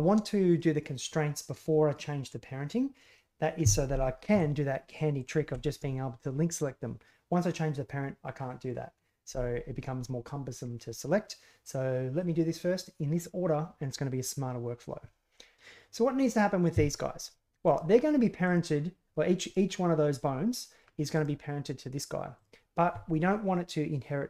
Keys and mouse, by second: 4.3 a, 5.1 right click, 5.4 l, 15.5 right click, 17.6 right click, 18.4 right click, 19.4 right click, 21.1 right click, 22.3-24.2 right drag.